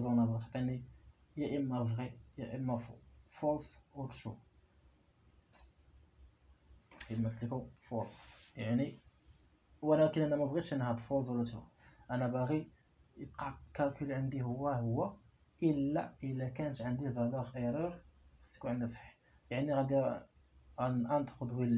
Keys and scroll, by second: 6.0 Return.